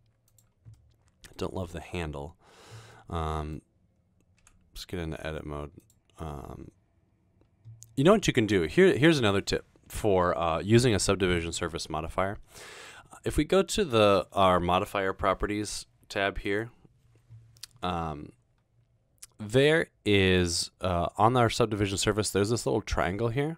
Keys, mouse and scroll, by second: 0.8 middle click, 2.9 middle click, 4.6 Tab, 16.5 click.